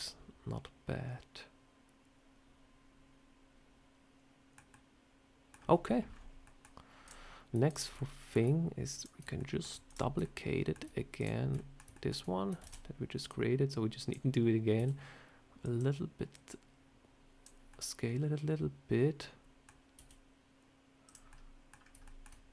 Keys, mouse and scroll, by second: 4.6 middle click, 5.5 scroll down 1, 6.9 click, 7.6 shift+click, 7.8 middle click, 8.3 scroll down 1, 8.9 shift+click, 9.2 scroll up 1, 9.3 middle click, 9.8 shift+click, 10.1 middle click, 11.1 shift+click, 11.4 middle click, 11.8 shift+middle click, 12.5 shift+d, 13.2 click, 14.6 s, 16.2 click, 17.6 middle click, 19.8 s, 21.2 middle click, 21.6 scroll down 2, 21.9 shift+middle click.